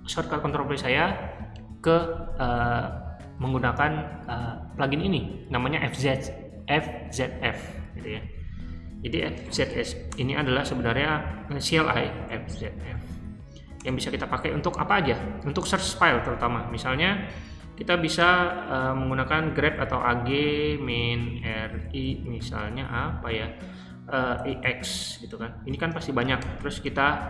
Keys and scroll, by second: 8.7-10.2 typing, 12.2-13.0 typing, 13.7 Return, 16.1 ctrl+d, 19.1 a, 19.7 g, 20.8-22.9 typing, 24.3-27.2 typing.